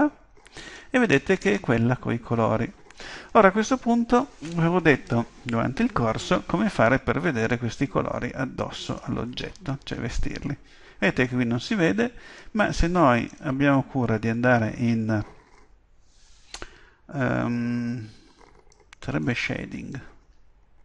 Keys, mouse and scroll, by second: 1.0-3.2 middle drag, 9.3-11.2 middle drag, 12.4-14.2 drag, 18.7-20.8 drag.